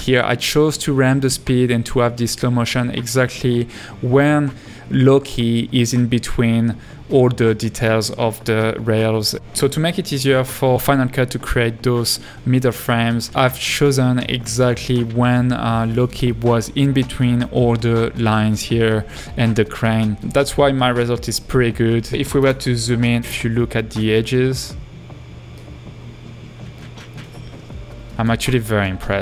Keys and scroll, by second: 7.1 space, 14.6 space, 17.1 space, 28.4-28.8 typing.